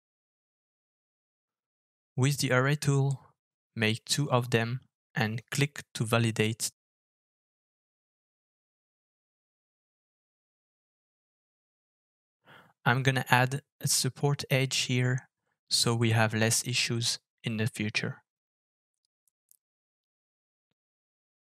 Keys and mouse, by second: 15.4-16.0 middle drag, 17.1 Tab, 18.3 click, 19.1 ctrl+r.